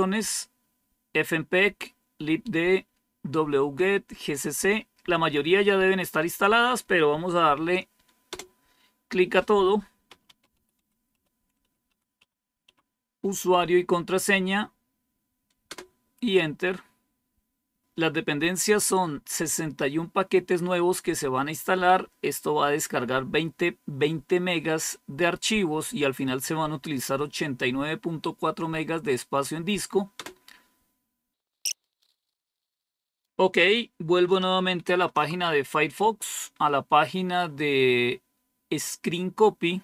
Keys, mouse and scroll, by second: 8.2 Return, 9.7-13.0 typing, 15.6 Return, 30.0 Return, 34.8 super+3.